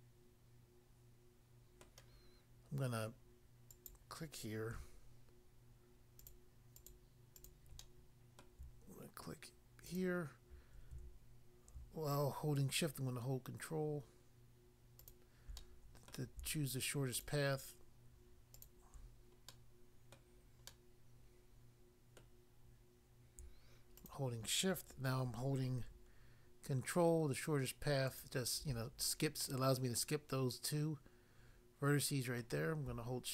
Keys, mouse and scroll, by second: 1.8 middle click, 3.7 click, 3.9 click, 6.2 shift+click, 6.8 shift+click, 7.3 shift+click, 7.8 middle click, 8.4 middle click, 9.9 shift+click, 15.0 ctrl+click, 15.1 ctrl+click, 15.6 middle click, 16.1 middle click, 17.1 shift+click, 18.5 shift+click, 19.4 middle click, 20.1 middle click, 20.7 middle click, 22.2 middle click, 24.0 shift+click, 24.1 shift+click, 28.1 ctrl+click, 29.4 middle click, 32.4 middle click.